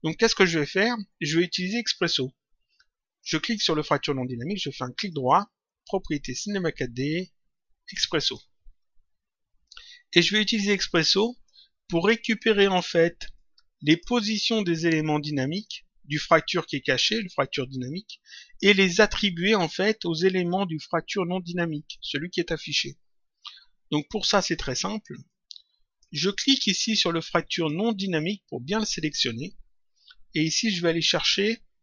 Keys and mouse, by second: 3.2 click, 4.9 right click, 8.2 click, 10.1 click, 11.4 click, 13.3 click, 15.5 click, 23.9 click, 25.2 click, 27.4 click, 31.0 click.